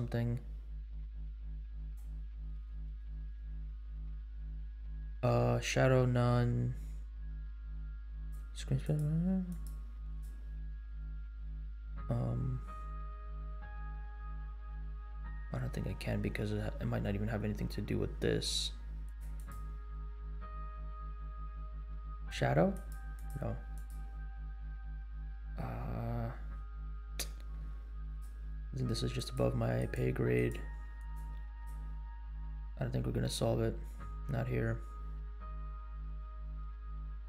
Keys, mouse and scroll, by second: 1.8 click, 2.1-3.2 scroll down 4, 8.3 click, 8.8 click, 9.5 click, 10.1 click, 15.2-15.8 scroll up 5, 17.5 scroll up 2, 19.0 click, 19.3 click, 19.8-20.3 scroll down 7, 22.1 click, 22.7 click, 23.1 click, 23.7 drag, 26.7-27.2 scroll down 2, 28.0 click, 29.1 click, 29.7 click, 30.3 click, 30.9 click, 31.5 click, 33.7-34.5 scroll down 5, 35.2-35.8 scroll down 2, 35.8-36.8 scroll down 3.